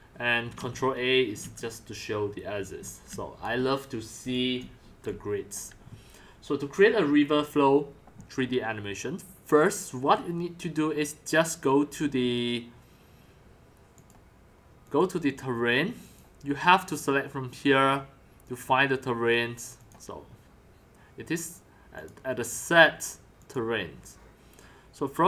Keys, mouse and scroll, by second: 0.6 ctrl+a, 1.4 ctrl+a, 2.8 x, 3.0 click, 3.1 c, 3.4 click, 4.2 x, 4.6 c, 5.5 drag, 5.6 c, 14.0 click, 14.8 click, 16.0 click, 16.9 click, 18.4 click, 21.9 click.